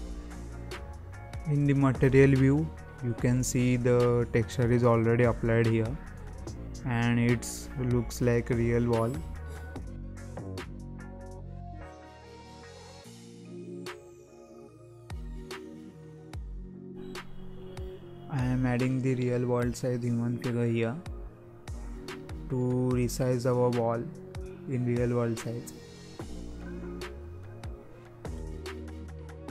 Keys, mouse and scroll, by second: 0.5 r, 3.1 scroll down 2, 3.4-3.9 scroll up 5, 3.9-4.7 middle drag, 4.7-5.0 scroll up 4, 5.0-6.7 shift+middle drag, 6.7-7.2 scroll down 2, 7.2 z, 8.0-8.3 scroll up 1, 8.3-9.7 middle drag, 9.7-10.1 scroll down 1, 10.1 shift+middle click, 10.3-10.6 scroll up 4, 10.6-11.2 middle drag, 11.2-11.6 scroll down 4, 11.6-12.1 middle drag, 12.1-12.9 scroll down 3, 13.3 ctrl+a, 15.5-15.9 scroll up 3, 15.9-16.9 middle drag, 16.9 alt+a, 17.0 scroll down 3, 17.2-17.5 scroll up 1, 17.5-17.9 middle drag, 17.9 click, 18.2 scroll down 2, 18.4-18.7 scroll up 1, 18.7-19.2 middle drag, 19.2 alt+a, 19.4-19.9 scroll down 1, 19.9-21.8 scroll up 1, 21.8-23.6 middle drag, 23.6 click, 24.1-24.4 scroll up 1, 24.4 middle click, 25.3 click, 26.4 click, 27.1-27.4 scroll up 1, 27.4-28.2 middle drag, 28.2 scroll down 2, 28.4 scroll up 1, 28.7-29.2 middle drag, 29.2-29.5 scroll up 1.